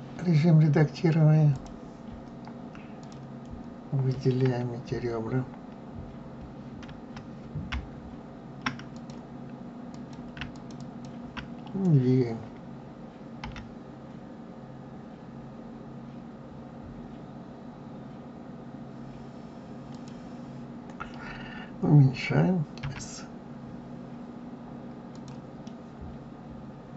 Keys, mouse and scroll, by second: 3.0 click, 6.8 a, 8.9 click, 9.8 click, 10.5 shift+click, 10.7 shift+click, 13.4 g, 22.8 s, 25.6-26.9 middle drag.